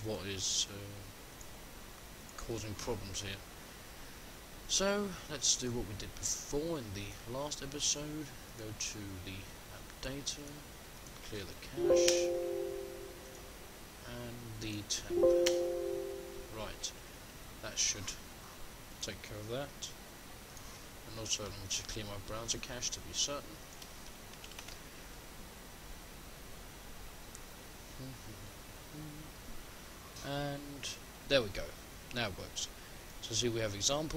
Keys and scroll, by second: 20.6 shift+F10.